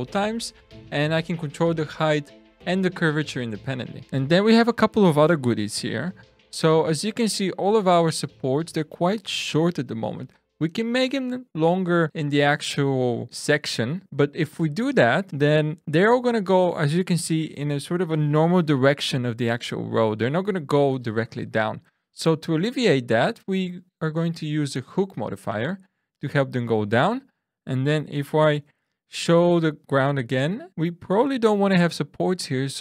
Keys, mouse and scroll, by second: 4.1 click, 24.9 click, 28.5 alt+h.